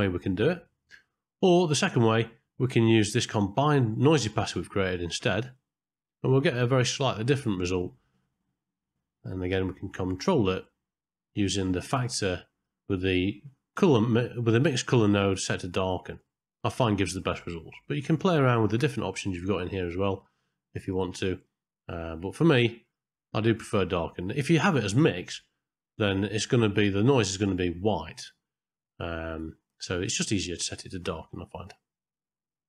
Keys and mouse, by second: 2.7-5.3 drag, 9.3-12.6 drag, 13.2 click, 15.4 click, 16.6-18.1 drag, 18.6-19.9 drag, 20.8-23.0 drag, 25.3-27.1 drag, 29.0 click, 29.7-31.1 drag.